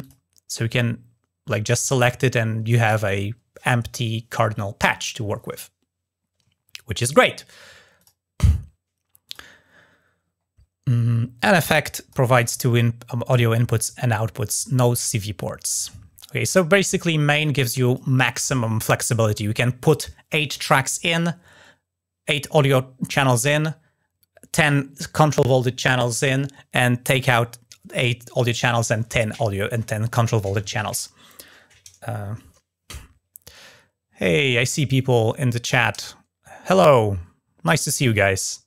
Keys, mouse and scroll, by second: 1.4 click, 7.7 click, 9.0 drag, 9.4 scroll down 1, 9.9-11.2 scroll down 1, 11.2 click, 12.2 click, 17.4 click.